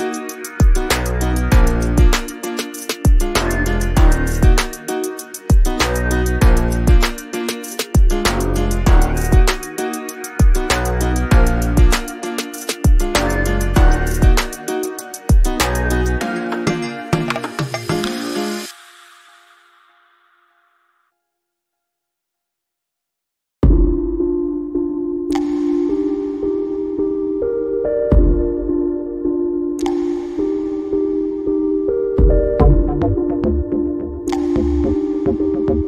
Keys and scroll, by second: 1.4 5, 4.9 shift+5, 5.3 space, 5.8 o, 6.6 Return, 11.1 ctrl+g, 14.6 c, 14.7 o, 25.9 Up, 28.2 Up.